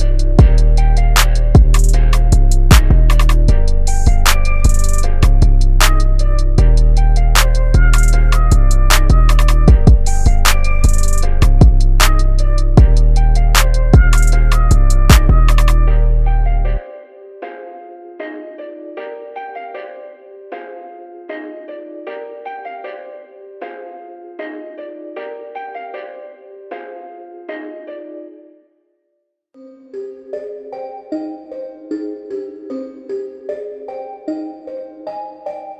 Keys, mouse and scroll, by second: 3.8-4.7 typing, 4.7 click, 7.3 Up, 11.4-15.2 drag, 11.4 typing, 19.5 Tab, 22.3 click, 32.3 i, 33.3 click, 34.0 v, 34.7 click.